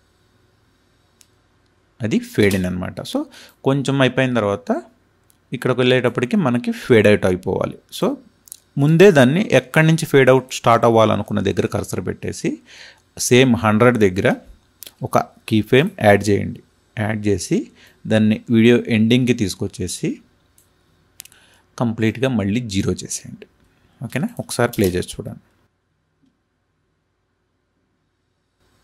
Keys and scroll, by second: 2.4 space, 24.6 space.